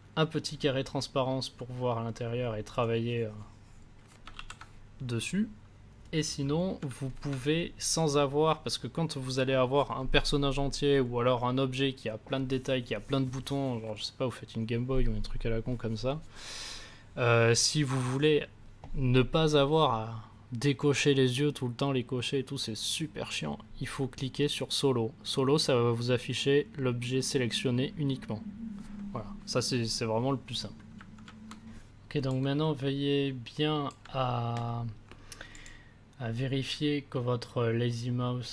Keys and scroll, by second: 4.3 ctrl+z, 6.8 a.